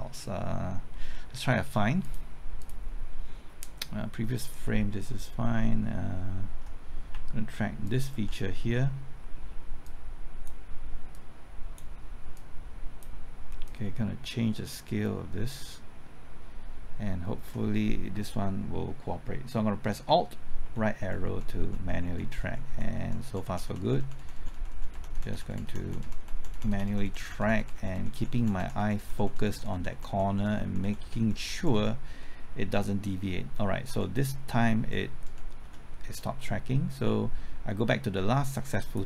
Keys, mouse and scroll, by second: 5.2 scroll up 1, 5.6 middle click, 6.3-7.1 scroll up 1, 7.8 ctrl+click, 9.8-16.2 drag, 20.6 alt+Right, 21.2 alt+Right, 21.2-21.9 typing, 21.9 alt+Right, 32.4-35.6 typing, 38.5-39.0 drag.